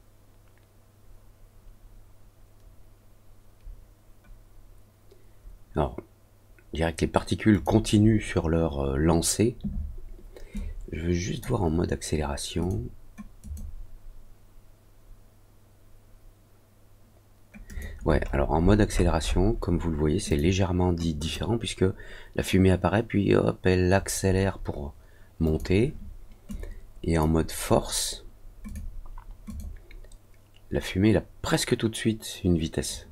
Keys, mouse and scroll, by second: 7.5 click, 10.5 click, 12.5 click, 13.4 click, 17.6 click, 18.2-18.8 scroll up 2, 18.9 middle click, 19.2 middle click, 20.2 click, 21.1 click, 25.4 click, 26.4 click, 28.6 click, 29.4 click.